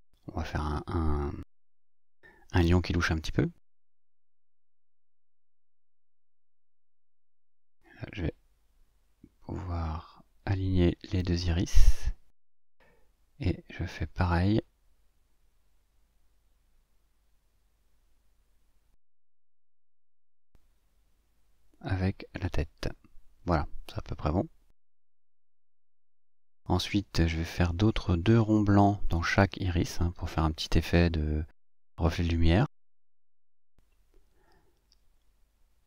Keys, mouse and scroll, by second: 0.1-1.3 drag, 1.8-4.1 drag, 5.0 click, 7.5-8.6 drag, 9.6 click, 11.0-12.1 drag, 13.1 click, 14.0-15.6 drag, 18.8 g, 19.6 click, 21.2 shift+click, 23.1 click, 24.3 click, 28.9 click, 31.2-32.5 ctrl+shift+drag, 34.0 click.